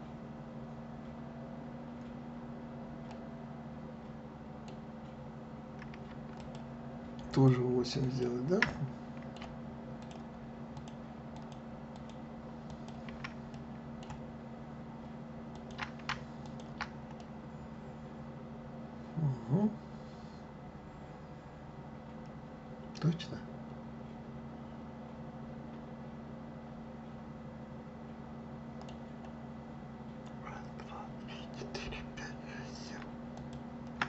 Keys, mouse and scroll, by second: 3.0-6.1 middle drag, 6.3 shift+click, 7.3 shift+click, 8.0 shift+click, 8.7-10.0 middle drag, 10.0 shift+click, 10.7 shift+click, 11.3 shift+click, 11.9 shift+click, 12.7 shift+click, 13.5-15.5 middle drag, 15.5 shift+click, 16.4 ctrl+click, 17.2-20.2 middle drag, 33.3 shift+click.